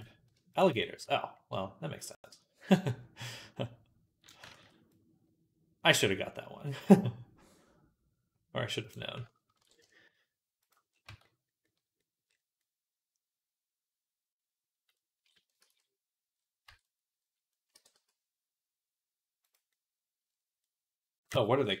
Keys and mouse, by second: 0.6 click, 0.8-2.6 middle drag, 2.6-10.5 drag, 4.3 ctrl+z, 9.4 ctrl+b, 10.5-13.4 middle drag, 10.9 Tab, 13.6 middle click, 13.6 click, 14.0 middle click, 14.1 middle click, 14.9-19.5 middle drag, 15.5 ctrl+s, 16.5 Tab, 17.6 g, 19.5-20.5 drag, 20.6-21.8 drag.